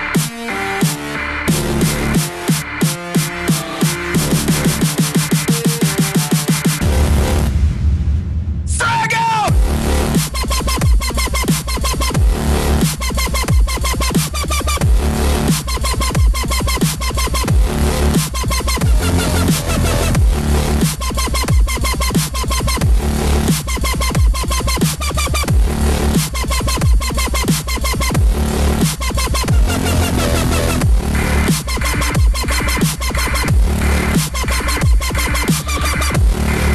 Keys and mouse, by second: 0.7 click, 4.6 z, 5.0 click, 7.6 g, 10.4 click, 12.2 middle click, 13.2 middle click, 16.7 click, 19.2 alt+click, 19.9 right click, 22.0 click, 24.3 s, 26.0 click, 27.2 middle click, 28.2 KP_1, 30.5 KP_3, 32.2 KP_1.